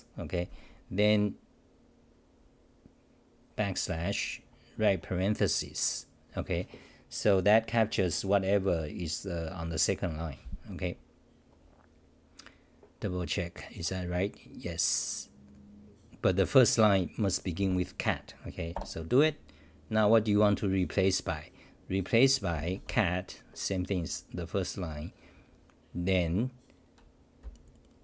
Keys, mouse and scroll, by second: 18.7 Return.